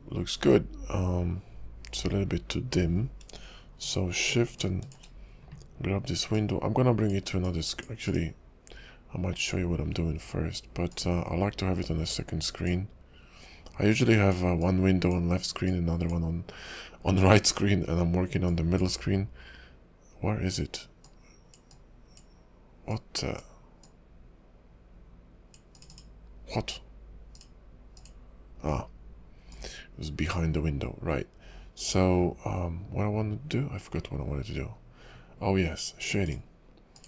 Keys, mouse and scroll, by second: 0.3 scroll up 2, 4.6 shift+click, 8.1 shift+click, 8.9 click, 10.9 click, 13.9 click, 14.6 click, 15.7 click, 18.5 click, 21.0 click, 21.7 click, 22.9 click, 25.1 click.